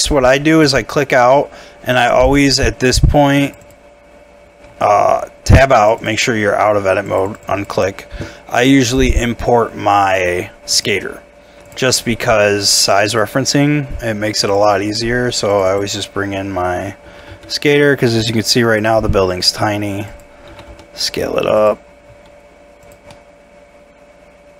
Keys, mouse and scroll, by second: 1.4 scroll down 1, 3.6 double click, 4.7 Tab, 6.0 double click, 13.1 double click, 16.2 scroll up 1, 17.2 g, 17.3 y, 18.4 scroll down 1, 19.3 s, 20.5 g, 20.7 y, 22.1 s, 23.1 middle click.